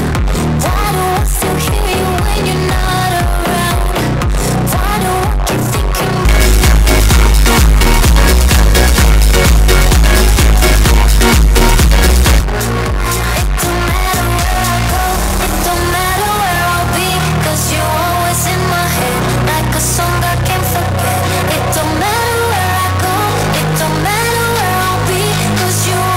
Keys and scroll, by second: 12.5 Page_Down.